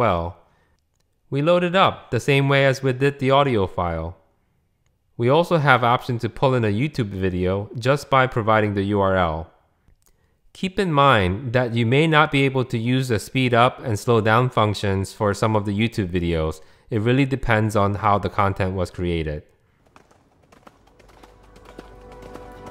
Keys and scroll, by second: 12.0 super+v, 15.4 Return, 17.0 ⟲.